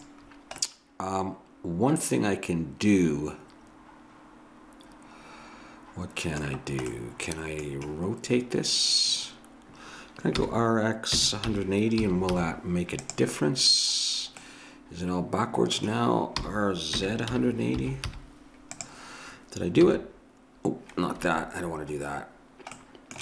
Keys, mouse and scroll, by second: 6.9-8.5 middle drag, 10.4 r, 16.4 r, 19.9 s, 22.8 middle click.